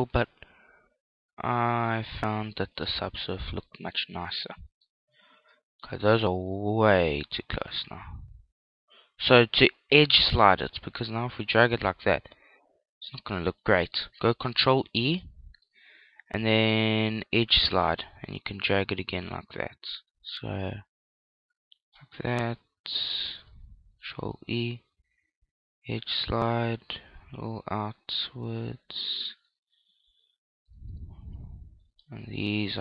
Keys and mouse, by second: 0.1 ctrl+r, 3.0 click, 3.2 Tab, 3.6-8.1 middle drag, 6.1 Tab, 8.4-11.0 middle drag, 12.1 click, 13.6 ctrl+z, 14.9 ctrl+e, 22.0 click, 23.2 right click, 24.1 ctrl+e, 29.3 click, 29.6-30.9 middle drag, 31.1 middle click, 31.3 right click, 32.3-32.8 middle drag.